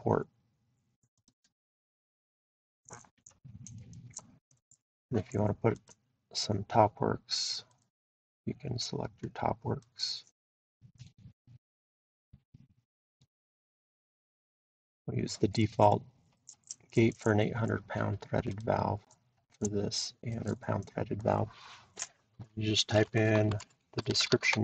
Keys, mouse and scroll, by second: 1.3-4.6 drag, 5.7-6.9 drag, 7.8 click, 9.8 click, 13.1 click, 18.6 click, 21.2 click, 22.9-24.6 typing, 24.2-24.6 drag.